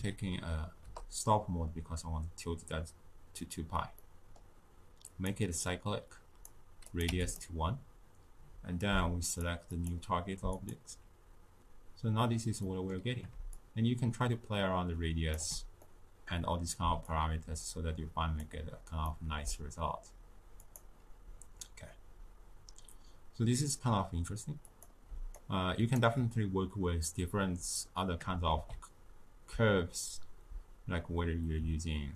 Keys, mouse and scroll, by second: 4.0-5.1 middle drag, 5.1 click, 6.1-7.3 drag, 9.2 click, 9.7 click, 12.6-13.2 scroll up 1, 13.2 middle click, 13.5-15.8 shift+drag, 15.8-17.1 middle drag, 17.1-19.1 drag, 19.1-20.6 middle drag, 20.6 click, 24.8 click, 25.1 d, 25.4 right click, 25.9 d, 26.0 d, 26.1 d, 28.5 shift+a.